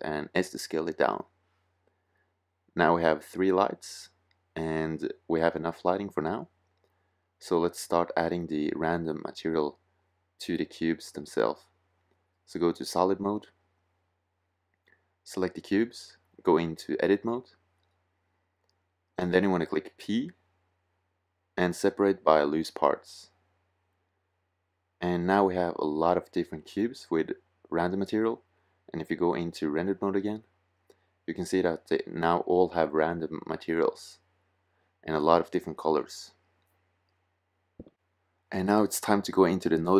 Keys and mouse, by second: 0.7-3.2 drag, 18.3-20.1 drag, 20.3 p, 23.7 p, 24.3 middle click.